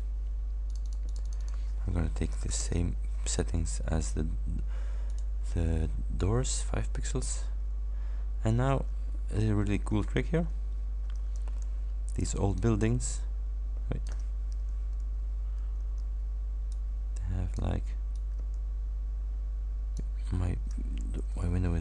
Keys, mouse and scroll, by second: 0.7 click, 2.4 shift+9, 2.6 shift+Return, 5.2 click, 8.0 ctrl+scroll down 2, 9.2 ctrl+scroll up 2, 10.1 ctrl+scroll down 2, 10.6 ctrl+scroll down 2, 11.6 ctrl+d, 12.7-14.4 ctrl+drag, 15.1 ctrl+y, 15.9 ctrl+d, 16.8 ctrl+click, 18.2-20.2 ctrl+drag, 21.4 Delete.